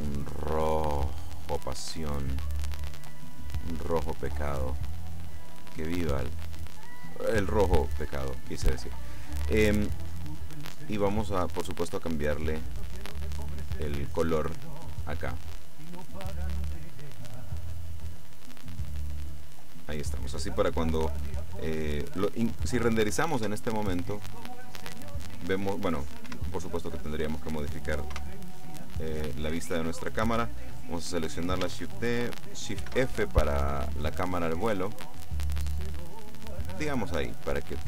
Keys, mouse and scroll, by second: 1.3-2.2 drag, 2.9-4.1 drag, 11.9 click, 14.7-15.3 scroll down 1, 15.7 click, 16.4-18.1 drag, 18.5-19.7 drag, 23.5 F12, 26.3 Escape, 28.2 KP_0, 31.3 right click, 32.8 shift+f, 33.1-33.5 shift+scroll down 3, 35.5 click.